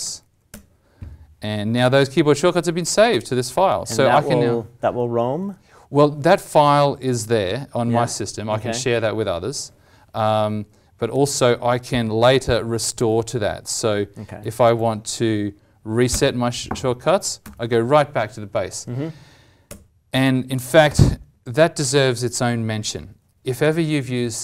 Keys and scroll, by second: 11.1 alt+t.